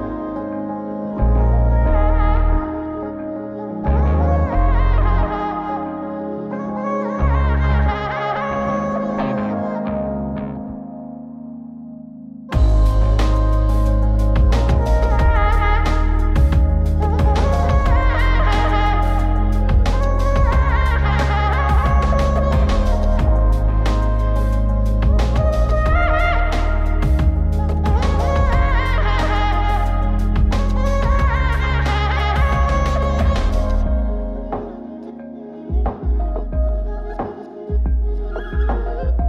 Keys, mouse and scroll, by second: 0.5 ctrl+c, 3.2 middle drag, 3.6 scroll down 2, 3.9 middle click, 4.8 ctrl+v, 8.8 click, 9.1-9.7 scroll up 3, 9.8-10.1 shift+middle drag, 10.6 shift+click, 11.5 ctrl+c, 14.4 ctrl+z, 16.3 g, 17.5 shift+click, 18.3 ctrl+c, 20.9-22.6 middle drag, 23.2 click, 24.1 r, 25.6 click, 26.0 shift+click, 26.7 ctrl+c, 28.8 click, 29.4 s, 30.2 click, 30.5 s, 31.4 click, 31.9 shift+click, 32.7 ctrl+c, 36.6 middle click, 38.0 click, 39.1 click.